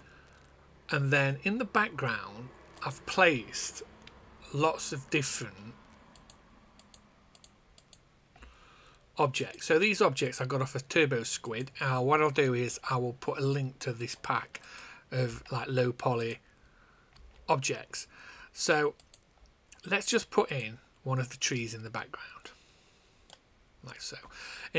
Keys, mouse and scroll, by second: 2.7 click, 8.3 a, 9.5 click, 11.4 click, 13.9 click, 15.2 a, 16.1 click, 17.1 a, 19.0 click, 20.4 click, 23.2 click.